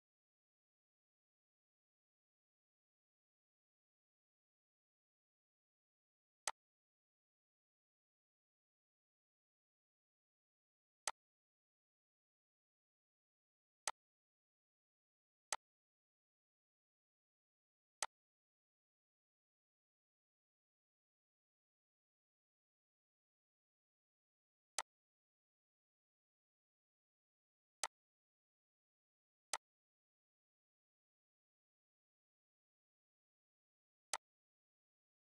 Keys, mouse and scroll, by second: 11.0 click, 16.9 right click, 18.0-20.4 drag, 20.4 right click, 24.8 click, 27.8-33.9 drag, 34.1-35.2 drag.